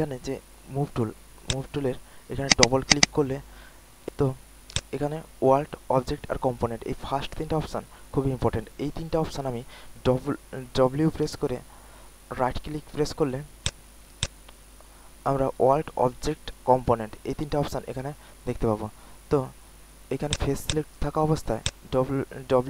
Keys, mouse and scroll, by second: 1.4-2.7 drag, 4.7-9.5 drag, 11.2-12.5 typing, 12.2 click, 12.5 click, 13.6 click, 13.9-14.5 typing, 17.0 click, 17.0 typing, 20.2 click, 21.2-21.7 typing, 21.6-22.6 drag.